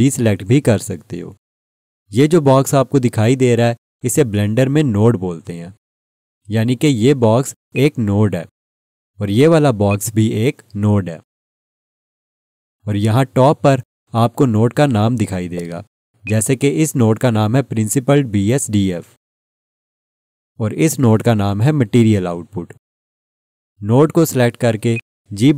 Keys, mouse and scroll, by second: 7.7 click, 14.9 scroll up 1, 16.2 alt+shift+click, 24.9 click.